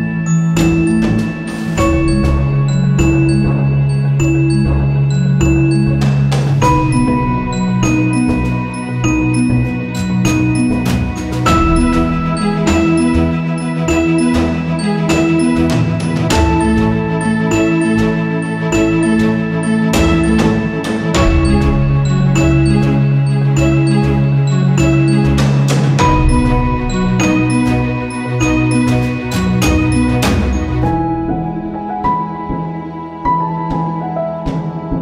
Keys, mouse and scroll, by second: 1.0 typing, 2.0 typing, 3.2 typing, 5.7 typing, 6.6 click, 7.9 right click, 8.5 click, 12.4-17.0 drag, 17.0 click, 17.6 ctrl+-, 18.3 space, 18.5 click, 18.8 space, 20.2 ctrl+s, 22.9 click, 23.8-27.8 shift+drag, 28.0 click, 28.9 right click, 29.5 click, 30.5-35.0 shift+drag.